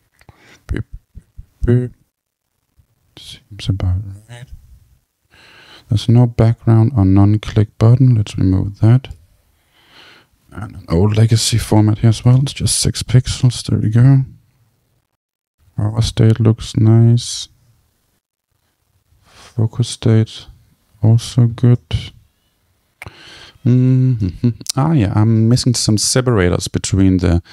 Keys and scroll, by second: 8.8 Return, 12.0 Return.